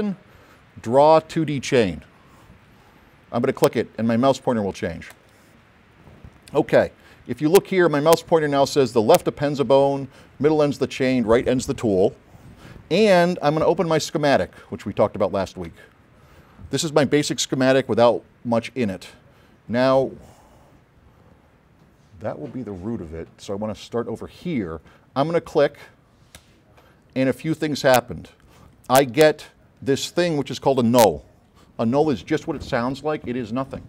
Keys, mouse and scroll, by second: 5.2 click, 15.9 9, 19.1 click, 26.5 click.